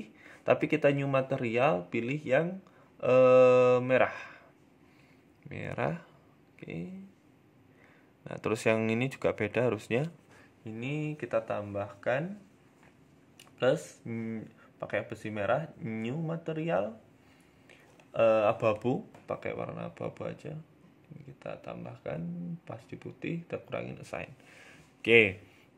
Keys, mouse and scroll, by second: 0.3 click, 0.6 click, 4.2 click, 7.2 middle click, 7.5 scroll up 1, 7.8 shift+middle click, 8.3 Tab, 8.8 a, 8.9 a, 9.2 l, 12.6 click, 13.2 click, 15.1 click, 15.2 click, 18.8 click, 23.2 click, 23.6 Tab, 24.2-24.6 scroll down 3, 24.5 middle click, 24.9-25.5 scroll up 2, 25.3 right click.